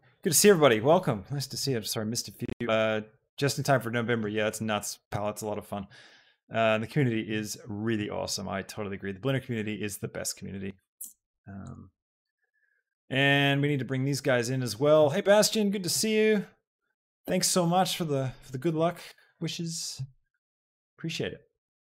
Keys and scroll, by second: 12.2 Tab.